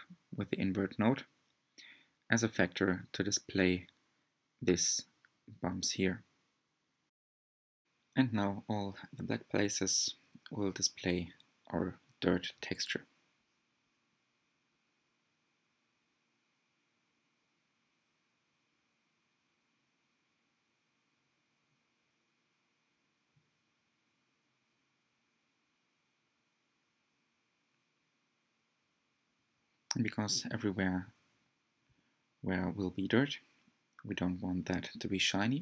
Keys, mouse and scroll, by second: 10.1-12.0 drag, 12.0 scroll down 2, 12.6-13.0 scroll down 2, 13.0 middle click, 13.5-14.1 scroll down 1, 14.1-16.8 middle drag, 16.8-17.5 scroll up 3, 17.6-18.1 scroll up 1, 18.1-18.7 scroll up 1, 23.3-26.8 drag, 28.2 click, 28.4-28.7 scroll down 2, 29.1-29.5 scroll down 4, 32.4 click.